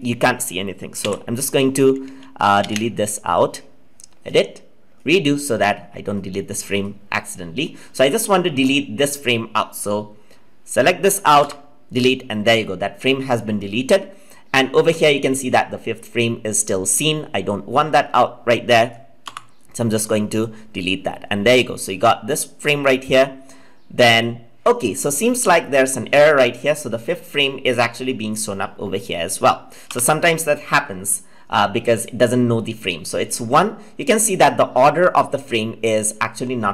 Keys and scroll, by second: 1.9 ctrl+z.